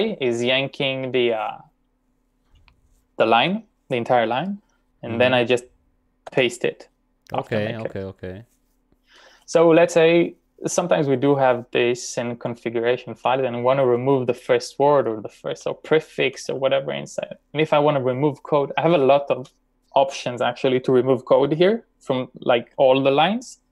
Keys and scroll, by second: 6.3 p, 14.8-16.4 typing.